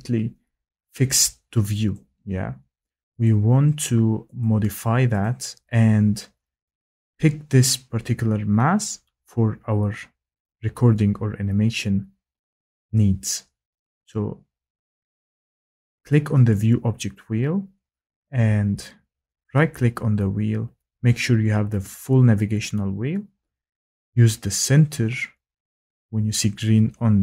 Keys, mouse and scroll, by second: 1.0 click, 1.9 click, 3.2 click, 4.4 click, 5.2 click, 16.5 click.